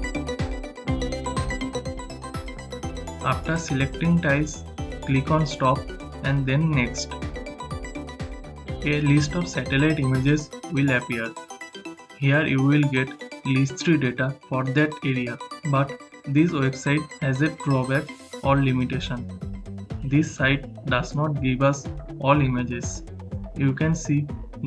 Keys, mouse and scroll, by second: 4.0-8.3 shift+drag.